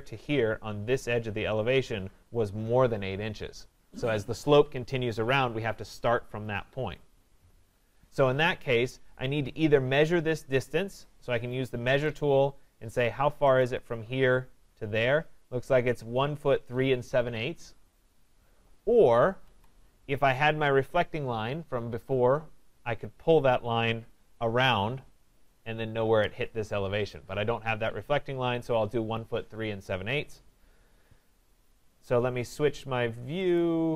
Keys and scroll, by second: 19.4 Escape.